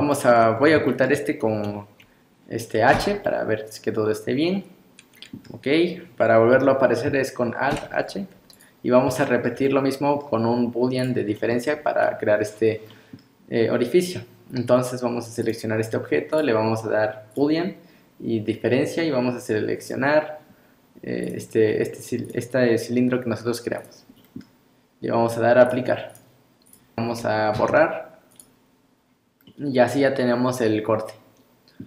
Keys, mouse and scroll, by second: 0.1 shift+middle click, 0.6 scroll up 1, 0.9 shift+middle click, 2.9 h, 3.2 middle click, 7.7 alt+h, 8.5 click, 8.9-9.3 scroll up 2, 9.2 shift+middle click, 9.7 middle click, 11.0 click, 11.4 middle click, 12.9 middle click, 15.4 click, 16.3 click, 19.9 click, 22.3 click, 24.2 middle click, 25.7 click, 26.7 click.